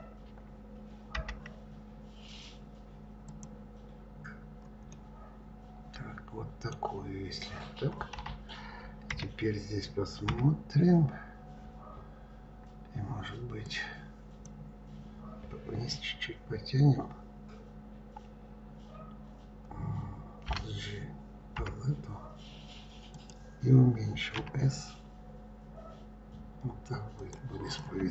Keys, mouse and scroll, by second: 1.2 Delete, 4.9-6.8 middle drag, 6.8-7.8 scroll down 3, 8.1 Delete, 10.2 KP_3, 12.3-13.6 scroll up 2, 13.6 click, 20.5 g, 24.3 s, 27.6 click.